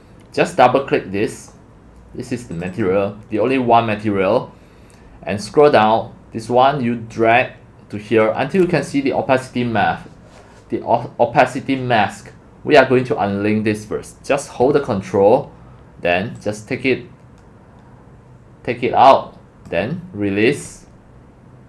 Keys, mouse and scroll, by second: 2.6 click, 4.9-5.3 middle drag, 4.9-6.1 scroll, 5.5 middle click, 7.1-8.2 drag, 15.0 ctrl+click, 15.4 ctrl+click, 16.4-19.7 ctrl+drag.